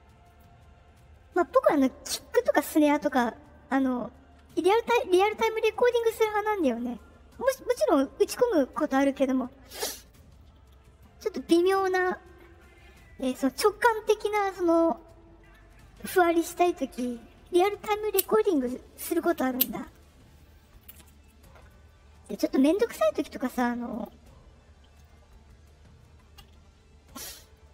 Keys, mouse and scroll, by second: 0.2 click, 23.8 click, 27.3-27.7 drag.